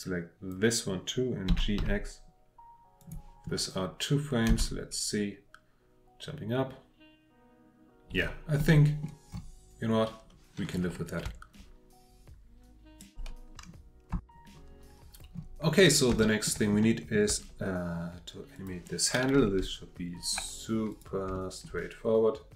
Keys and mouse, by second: 1.5 g, 1.8 x, 3.0 click, 4.5 space, 8.6-9.0 drag, 14.3 F8, 14.3 F9, 16.2 middle click, 16.8 middle drag, 18.5 click, 19.6 Delete, 21.0-21.3 drag, 21.4 shift+drag.